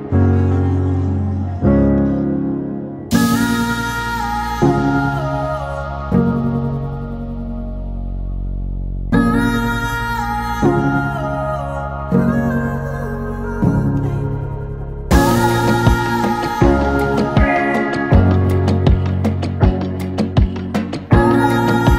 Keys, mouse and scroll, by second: 3.6-4.0 scroll up 4, 4.0-5.1 scroll down 6, 4.2 middle click, 4.9 KP_1, 8.8 scroll down 1, 9.0 middle click, 11.8 KP_1, 12.2-13.3 scroll up 3, 13.5 shift+right click, 14.2 shift+a, 15.9 r, 18.0 middle click, 19.0 s, 20.2 KP_1, 20.6-21.6 scroll up 5, 20.9 shift+middle click, 21.6 s.